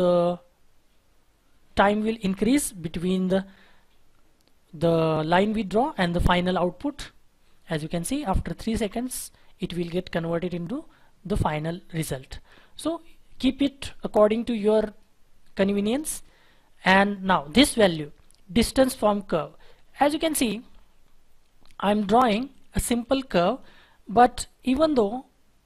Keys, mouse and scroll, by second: 0.1-1.8 scroll up 1, 1.8-2.3 scroll down 1, 2.4-4.8 scroll up 1, 4.9 scroll down 1, 5.5-8.5 scroll up 1, 16.4-19.4 scroll down 1, 20.6 Delete, 21.0-21.4 scroll down 1, 21.4-22.7 scroll up 1, 23.0 double click, 24.1-25.6 scroll up 1.